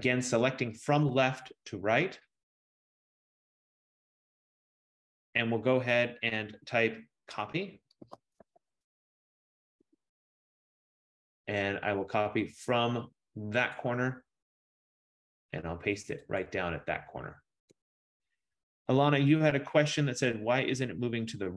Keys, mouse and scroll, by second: 0.1 click, 7.8-9.4 typing, 10.0 Return, 13.8 click, 16.5 click, 17.8 Return.